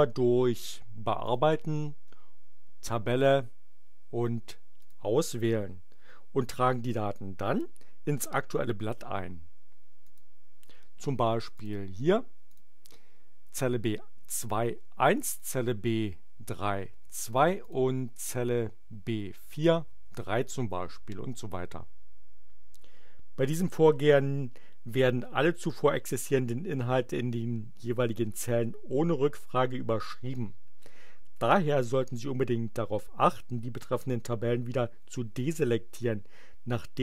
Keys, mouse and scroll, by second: 1.2 click, 4.7 click, 10.0 click, 11.4 click, 12.4 click, 14.7 1, 15.3 click, 16.9 2, 17.6 click, 19.9 3, 20.7 Return.